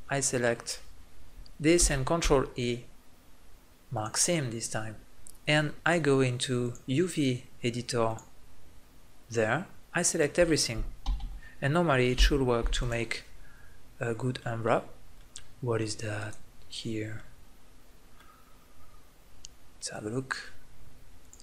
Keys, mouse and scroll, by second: 1.8 ctrl+e, 5.4 click, 5.7-8.5 drag, 8.5-9.9 middle drag, 9.9-11.0 drag, 11.0 a, 11.2 a, 11.7-13.5 middle drag, 12.2 u, 16.2-17.2 right drag, 17.2-18.2 middle drag, 18.9-21.4 middle drag.